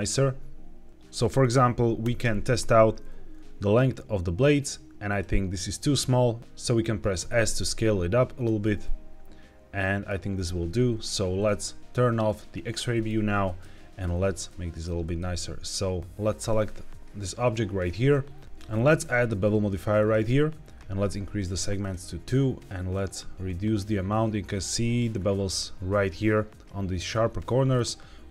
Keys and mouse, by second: 1.9 KP_1, 2.9 r, 7.1 s, 8.2 click, 8.5-9.9 middle drag, 12.1 click, 12.8 shift+middle drag, 13.3 middle click, 14.4-14.7 middle drag, 14.9 shift+middle drag, 18.9-20.0 drag, 21.8 click, 22.8-24.4 shift+middle drag, 27.3-27.6 middle drag.